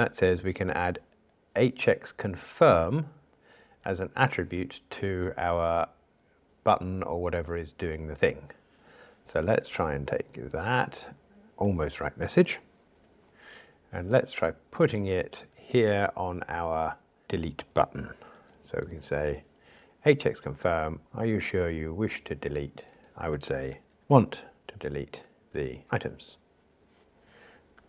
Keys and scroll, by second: 18.8 super+v, 25.5 alt+shift+Right.